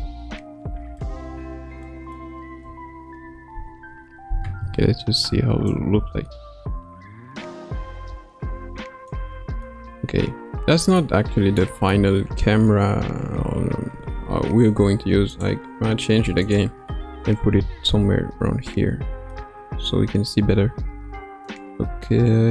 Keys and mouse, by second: 1.2 Tab, 1.8 middle click, 2.6 KP_0, 5.6-9.2 drag, 9.6-11.0 middle drag, 11.6 middle click, 13.1 KP_0, 16.4 click, 17.0-19.4 middle drag, 21.4-22.5 drag.